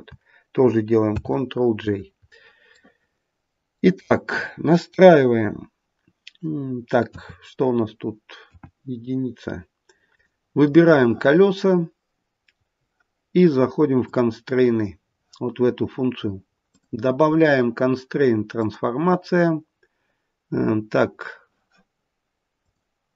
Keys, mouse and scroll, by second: 1.1 ctrl+j, 2.7 middle click, 7.0 KP_3, 8.3 KP_1, 10.0 click, 10.6 middle click, 13.9 click, 22.5 click.